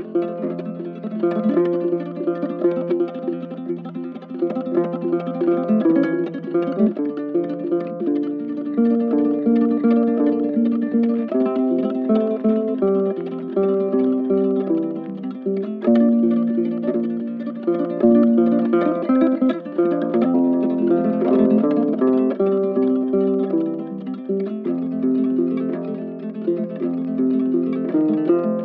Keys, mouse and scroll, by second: 16.6 ctrl+shift+click, 17.5 ctrl+z, 18.5 ctrl+shift+click, 19.0 ctrl+shift+space, 22.9 ctrl+shift+click, 26.1 ctrl+z, 26.7 ctrl+shift+click, 27.2 ctrl+shift+click, 27.6 ctrl+shift+space.